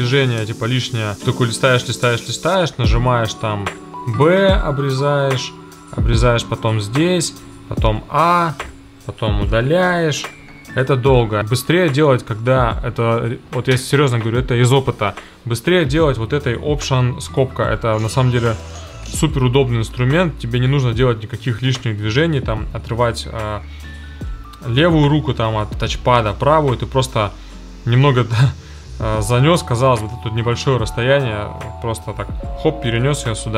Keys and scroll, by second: 2.3 b, 7.9 a, 9.5 BackSpace, 11.2 super+z, 17.8 space, 18.6 alt+], 19.1 space, 20.0 super+z, 32.9 alt+].